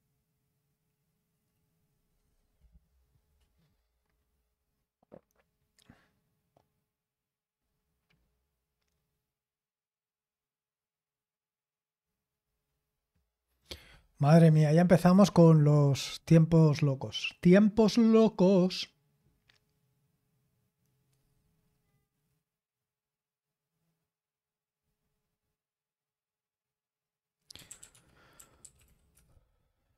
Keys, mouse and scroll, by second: 27.3-29.3 typing.